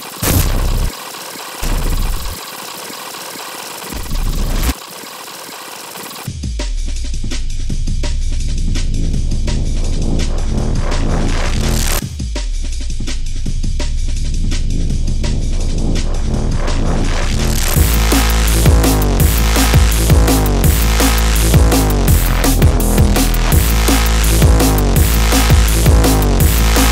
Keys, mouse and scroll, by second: 0.0-2.3 typing, 0.2 click, 0.3 scroll up 2, 0.5 scroll down 2, 0.9 click, 1.2 alt+click, 1.5 click, 1.8-2.3 scroll up 2, 2.3 scroll down 2, 2.7 ctrl+click, 2.9 scroll up 2, 3.0 click, 3.2 right click, 3.7 click, 3.9 space, 4.6 space, 4.8 ctrl+right click, 5.0 Escape, 5.2 w, 5.3 scroll down 2, 5.4 right click, 5.6 scroll up 2, 6.1 click, 6.2 space, 6.4 scroll down 2, 11.7 click, 13.1 click, 13.9 click, 14.9-16.3 typing, 17.7 BackSpace, 18.1 BackSpace, 19.4 click, 21.8 click, 24.1-26.9 drag.